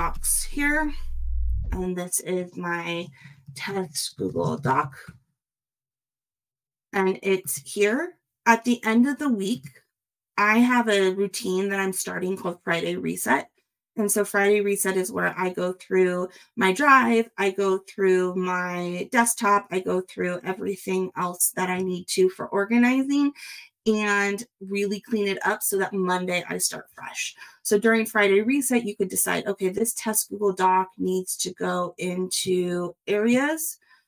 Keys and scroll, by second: 3.2 shift+t, 3.9 shift+g, 4.6 shift+space, 4.6 shift+d.